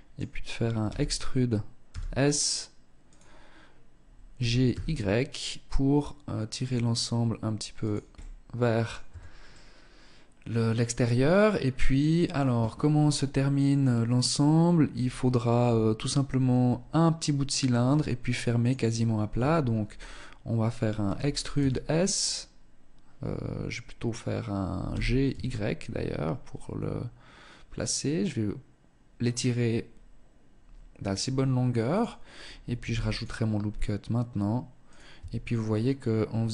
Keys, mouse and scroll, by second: 0.1 e, 3.2 click, 3.5 g, 7.3 middle click, 8.3 Tab, 8.7 middle click, 18.6 Tab, 20.2 e, 31.3 click, 32.0 ctrl+r, 34.1 click, 34.3 Tab, 36.2 t.